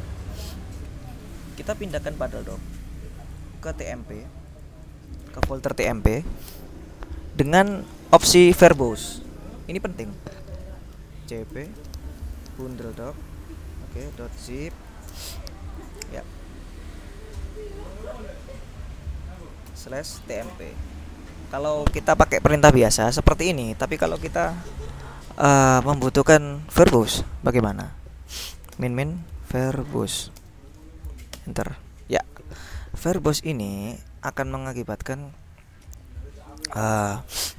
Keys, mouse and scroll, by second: 2.5-3.8 drag, 4.6 click, 11.2-15.5 typing, 19.7-21.2 typing, 26.9 ctrl+Left, 28.6-30.8 typing, 31.4 Return, 33.4 click, 34.8 click.